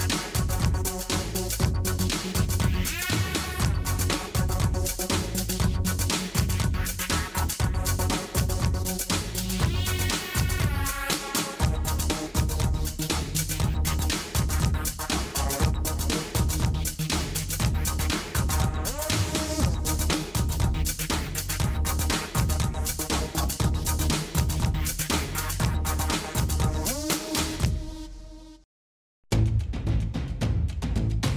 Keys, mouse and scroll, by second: 2.7 click, 2.8 middle click, 3.5 middle click, 3.7 middle click, 4.6 middle click, 5.0 middle click, 5.8 middle click, 5.9 click, 6.2 middle click, 6.7 click, 6.9 middle click, 8.0 middle click, 10.0 click, 10.1 middle click, 10.6 click, 10.9 Tab, 11.3 s, 11.5 s, 12.0 a, 12.6 click, 13.1-14.3 middle drag, 14.3 s, 15.8 s, 18.3 click, 18.6 s, 20.6 click, 21.0 Tab, 22.0 a, 22.4 middle click, 22.8 middle drag, 23.6 s, 25.6-26.5 drag, 26.2 s, 28.1-29.6 middle drag, 29.7 middle click, 30.0 click, 30.1 middle click, 30.2 click, 30.8 click, 31.1 click.